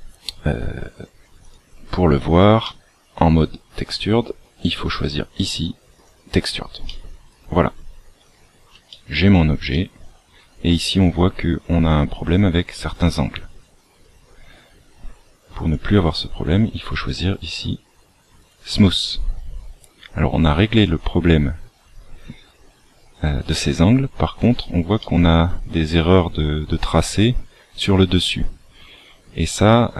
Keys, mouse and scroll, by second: 1.3 click, 2.5 middle click, 3.8 click, 6.8 middle click, 8.3 scroll up 2, 8.9 shift+middle click, 9.7 middle click, 15.6 click, 18.3 click, 24.9 shift+middle click.